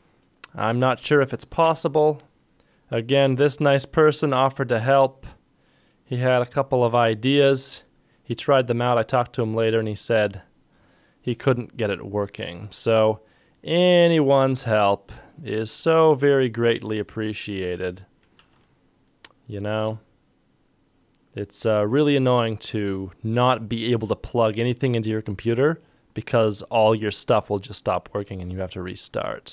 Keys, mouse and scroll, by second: 2.5 ctrl+shift+Tab, 2.5 ctrl+click, 18.4 ctrl+Tab.